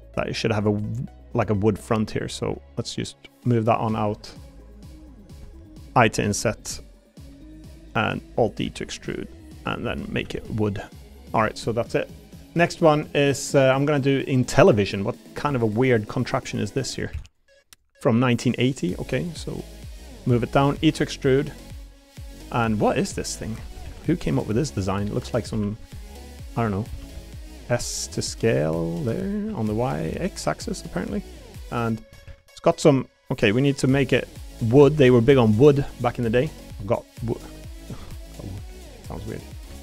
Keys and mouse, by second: 1.7 shift+click, 2.3 shift+click, 3.1 click, 6.3 i, 7.2 i, 8.6 alt+e, 9.6 click, 10.1 a, 10.3 g, 15.2 middle click, 15.6 shift+middle click, 16.4 click, 16.8 middle click, 17.1 shift+d, 17.2-19.0 right drag, 19.0 middle click, 20.3 click, 20.7 e, 21.7 click, 23.3 middle click, 23.8 ctrl+r, 25.5 s, 25.8 y, 27.1 s, 27.1 x, 29.5 y, 30.1 x, 31.5 click, 32.3 ctrl+r, 33.3 click, 33.8 l, 34.7 a, 34.9 g, 36.0 click, 36.3 3, 36.6 middle click, 37.1 middle click, 38.1 middle click, 38.9 shift+click, 39.3 middle click.